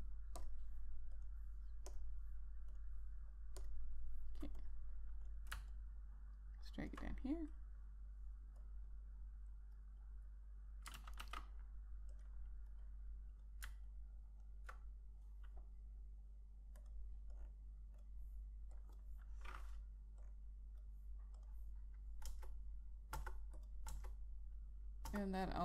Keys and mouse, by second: 6.5 alt+click, 9.4 click, 11.7 ctrl+z, 12.0 ctrl+z, 12.9 click, 14.6 alt+click, 17.5 click, 23.0 click, 23.9 Return, 24.3 click, 24.7 Return.